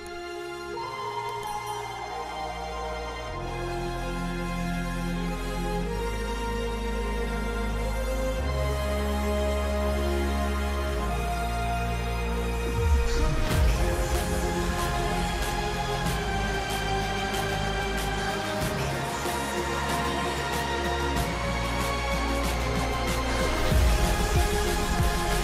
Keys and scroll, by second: 16.3 ctrl+u.